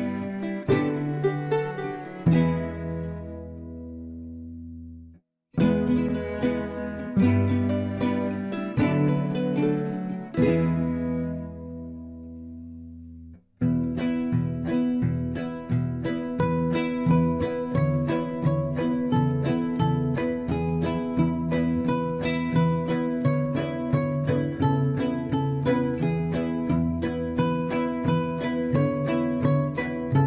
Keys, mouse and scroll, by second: 0.9 f, 1.2 click, 2.0-2.3 scroll down 1, 2.3-4.1 middle drag, 4.1-4.6 scroll up 2, 5.7 click, 7.2 shift+click, 8.4 f, 9.5 click, 10.8 click, 12.2 shift+click, 14.3-17.5 right drag, 17.5-18.7 drag, 19.2 scroll up 1, 20.4 click, 21.6 shift+click, 22.9 f, 23.4 click, 24.6 click, 25.9 shift+click, 27.3 f, 27.7 click, 28.4-29.0 scroll down 4, 29.0-30.2 middle drag.